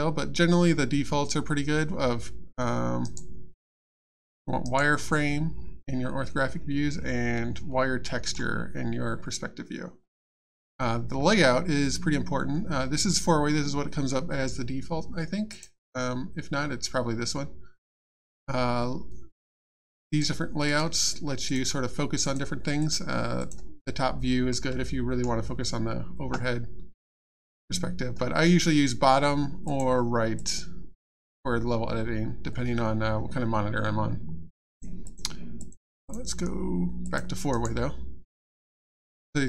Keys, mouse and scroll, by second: 3.0 right click, 3.5 click, 4.6 right click, 15.5 click, 20.1 click, 21.5 click, 22.8 click, 24.6 middle click, 26.9 click, 29.6 click, 34.7 click, 36.0 click, 37.5 right click.